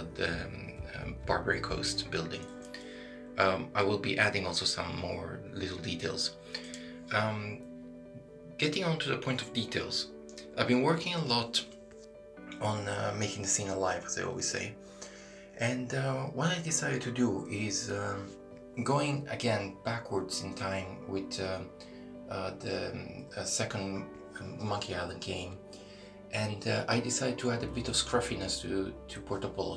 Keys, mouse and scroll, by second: 0.5 shift+middle click, 0.8-1.2 scroll down 2, 1.3 shift+middle click, 2.2 scroll up 1, 11.3 right click, 18.2 click, 19.6 right click, 20.8 click, 26.1 right click, 26.6 shift+middle click, 29.1 e.